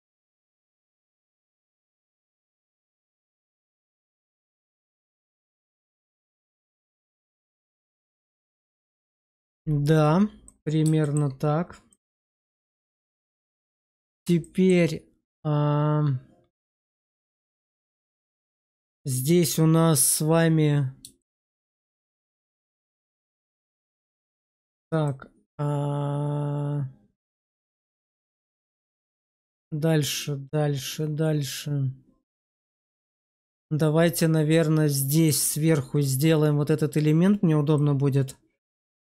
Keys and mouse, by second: 0.8 middle click, 2.5 ctrl+b, 5.8 shift+click, 6.3 Tab, 6.8-7.3 middle drag, 7.4 shift+middle drag, 10.3-10.7 middle drag, 10.9 shift+middle drag, 11.8 middle click, 12.1-12.7 middle drag, 12.9 shift+middle drag, 14.3 shift+middle drag, 16.9 middle click, 17.8 middle click, 18.5 shift+middle drag, 21.1 shift+middle drag, 21.6-22.2 middle drag, 22.4 shift+middle drag, 24.5 shift+middle drag, 24.9-28.9 middle drag, 29.2 shift+middle drag, 30.1-35.1 middle drag.